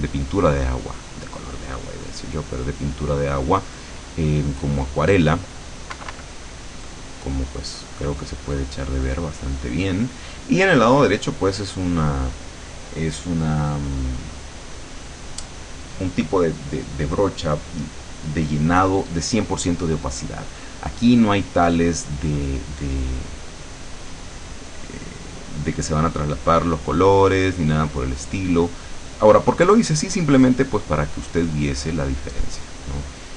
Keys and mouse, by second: 6.1 KP_Subtract, 8.1-10.0 middle drag, 10.0 click, 23.1-33.3 drag.